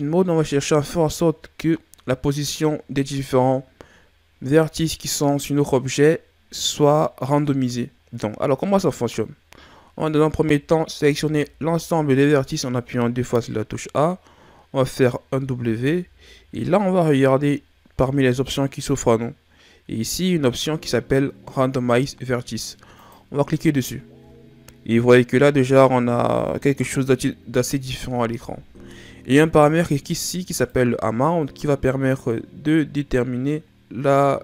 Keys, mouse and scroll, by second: 7.9 middle click, 8.4-9.5 scroll up 1, 10.1 a, 11.0 a, 15.2 w, 30.6 click.